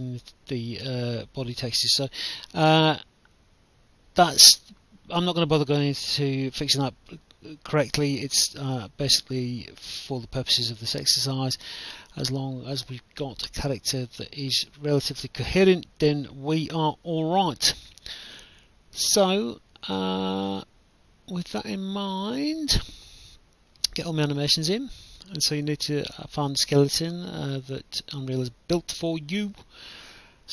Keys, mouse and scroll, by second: 0.2 right click, 1.1 right click, 4.6 alt+F9, 6.1 click, 6.5 right click, 7.2 click, 7.7-11.8 typing, 13.3 click, 14.2 click, 17.3 click, 18.4 click, 19.3 shift+click, 21.2 ctrl+click, 21.9 click, 22.8 right click, 24.3 click, 26.0 click, 26.9 click, 29.0 click, 30.0 click.